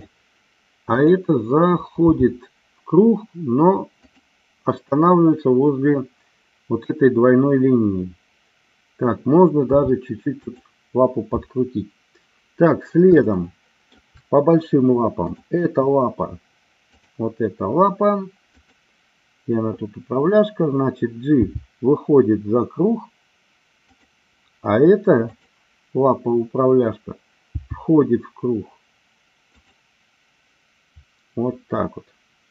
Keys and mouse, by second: 1.0 click, 2.0 g, 4.0 click, 9.7 r, 10.5 click, 13.1 shift+middle click, 21.4 g, 23.8 click, 25.2-26.3 drag, 27.5 g.